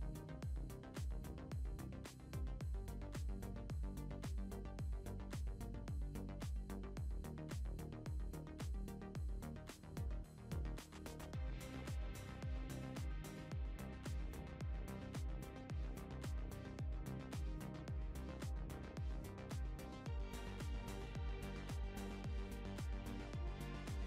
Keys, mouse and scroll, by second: 0.1 scroll down 1, 0.1-2.3 shift+middle drag, 2.3 r, 5.4-8.0 shift+middle drag, 7.1-7.7 scroll up 2, 8.0-9.4 drag, 8.0 scroll up 1, 9.4 s, 11.1-11.5 middle drag, 11.5 scroll up 2, 12.2 click, 12.2 scroll up 1, 13.3 s, 15.7-17.1 shift+middle drag, 17.1 click, 21.2-22.2 middle drag, 22.2-22.7 scroll up 4, 22.7-23.7 middle drag, 23.7 click.